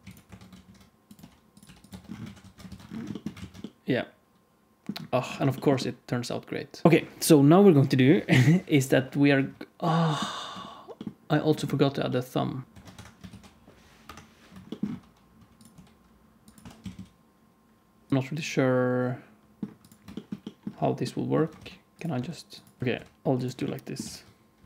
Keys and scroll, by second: 0.0-1.6 typing, 0.2 Tab, 0.4 alt+z, 1.8 Tab, 2.3 alt+z, 2.3 alt+a, 2.6 ctrl+s, 3.3 alt+shift+z, 6.8 alt+shift+z, 6.8 alt+a, 6.8 ctrl+s, 12.6-16.6 typing, 16.6 alt+z, 18.1 alt+a, 18.1 ctrl+s, 21.5-22.9 typing, 23.9 g.